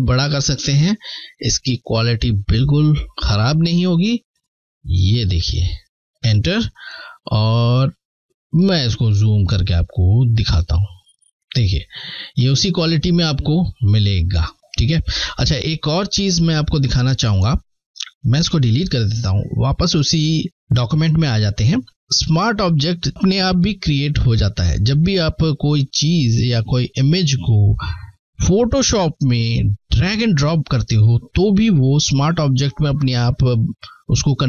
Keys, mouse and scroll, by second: 0.2 click, 0.3 shift+click, 5.4 Return, 7.7 scroll up 2, 8.7 alt+scroll up 1, 10.4 alt+scroll up 1, 11.6 scroll down 2, 17.5 Delete, 18.9 click.